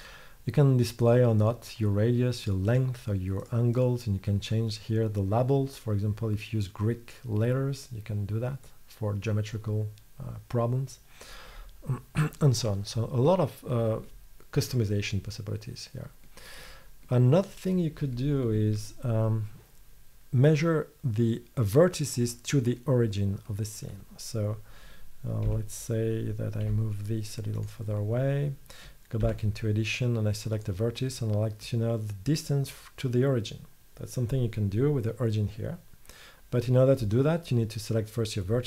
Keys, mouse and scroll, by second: 13.4-16.5 middle drag, 25.5 Tab, 25.5-26.7 middle drag, 26.7 g, 29.3 Tab, 30.1 middle click.